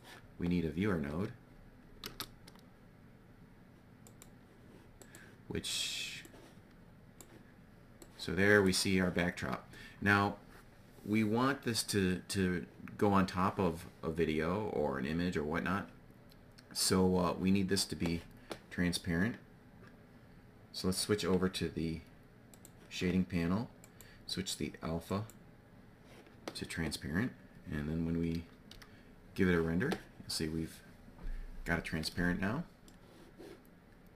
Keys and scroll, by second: 2.0 shift+a, 28.2 F12.